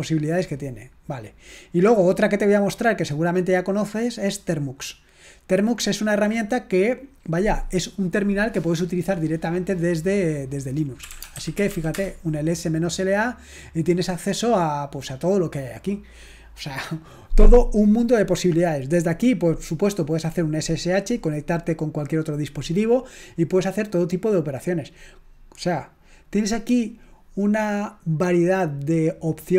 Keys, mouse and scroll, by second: 0.1 click, 2.2-4.0 scroll down 2, 4.4 click, 10.9-12.2 typing.